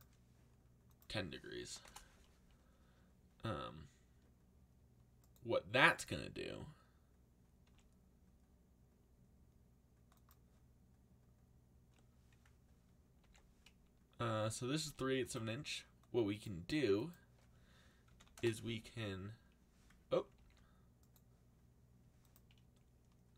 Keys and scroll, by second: 1.4-2.2 typing, 7.6 g, 13.2 ctrl+z, 14.7 g, 17.8-18.7 typing, 20.3 ctrl+z.